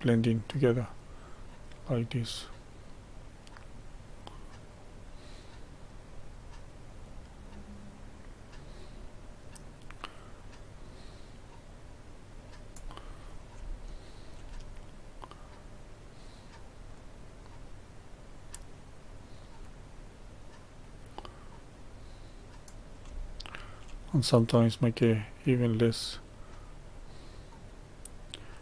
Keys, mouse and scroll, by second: 13.0-13.3 scroll down 2, 13.7 shift+middle click, 14.5-15.4 scroll up 1, 15.4-23.2 drag, 23.2-25.5 shift+middle drag, 25.5-28.6 drag.